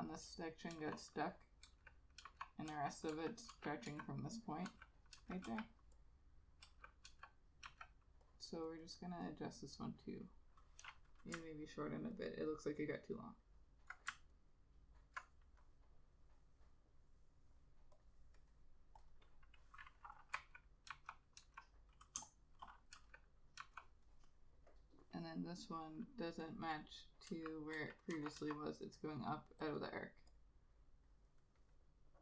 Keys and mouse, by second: 0.9-5.6 typing, 6.8 [, 7.2 ], 7.8 ], 8.9 double click, 12.3 alt+click, 14.5 alt+click, 19.2 double click, 21.0 ], 21.5 ], 22.3 space, 23.7 ], 27.4 [, 27.9 [, 28.5 ], 29.9 double click.